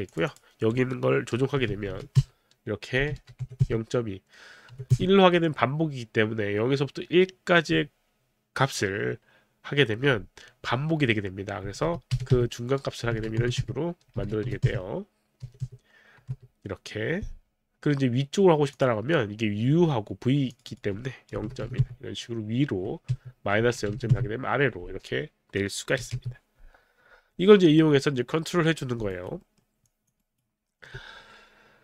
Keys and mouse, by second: 0.1 click, 0.3 click, 1.5 KP_0, 1.9 KP_1, 1.9 KP_Decimal, 2.7 Return, 3.1 KP_0, 3.2 KP_Decimal, 3.4 KP_2, 3.6 Return, 4.3 Return, 4.7 KP_1, 4.9 Return, 4.9 KP_1, 11.7-16.2 typing, 12.8 Return, 13.6 Return, 14.7 Return, 15.4 Return, 18.7 click, 20.6 click, 21.3 KP_0, 21.4 KP_Decimal, 21.7 KP_1, 21.8 Return, 23.1 KP_Subtract, 23.6 KP_0, 23.7 KP_Decimal, 24.2 Return, 24.2 KP_1, 26.0 KP_0, 26.1 Return, 29.1 alt+right click, 29.4 alt+middle click, 30.1 alt+click, 30.1 alt+middle click, 30.2 alt+right click, 30.7 alt+middle click, 31.2 alt+middle click.